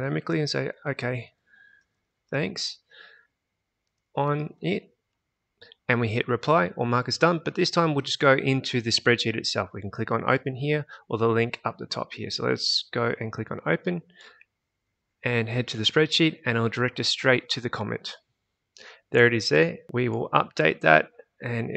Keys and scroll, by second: 0.9-5.3 typing.